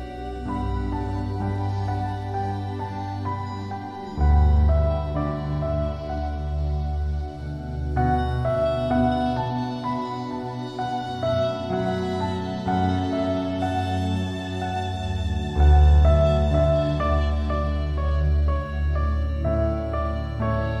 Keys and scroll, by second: 2.4 ctrl+z.